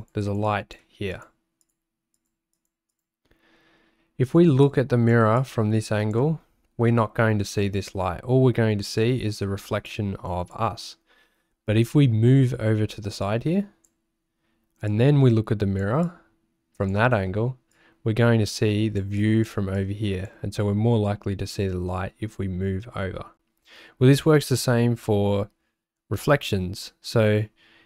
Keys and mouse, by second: 0.2 click, 0.5 click, 1.1 click, 1.6 click, 2.1 click, 2.5 click, 2.9 click, 4.6 click, 5.4 click, 9.0 click, 9.9 click, 13.2 click, 14.9 click, 16.0 click, 17.7-19.0 drag, 19.2 click, 19.8 click.